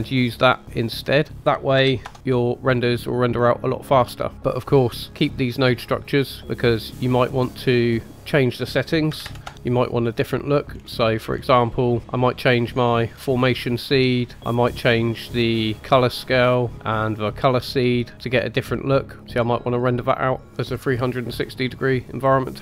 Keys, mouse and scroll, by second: 0.3-2.1 drag, 2.7-3.2 scroll down 2, 3.1-4.4 middle drag, 4.7-6.9 drag, 7.3-7.6 middle drag, 8.5-9.9 drag, 10.7-12.0 scroll up 6, 12.0 middle click, 13.6-15.1 drag, 15.1-16.4 middle drag, 16.4-19.2 drag, 19.2 middle click, 19.3 click, 19.6 middle click, 19.8-20.6 drag, 20.6 middle click, 22.1 scroll down 1.